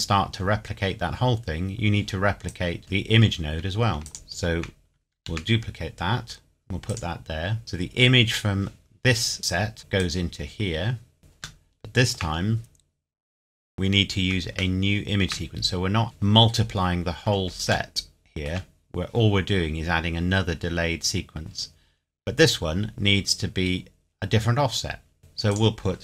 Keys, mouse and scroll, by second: 2.5 click, 4.0 shift+click, 5.2 shift+d, 6.9 click, 10.0 click, 11.6 shift+middle click, 14.8 shift+middle click, 16.0-17.1 scroll down 1, 17.2-17.6 scroll down 1, 17.9 shift+middle click, 18.8-20.6 scroll up 1, 22.7-23.6 scroll down 1, 25.2 click.